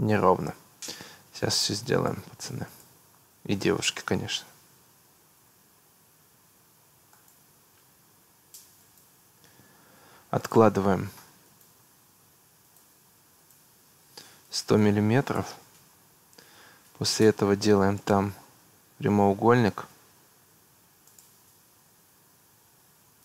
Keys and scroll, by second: 0.0 Delete, 9.4 Escape, 14.4 1, 14.8 0, 15.4 Return, 16.4 Escape, 20.5 Escape.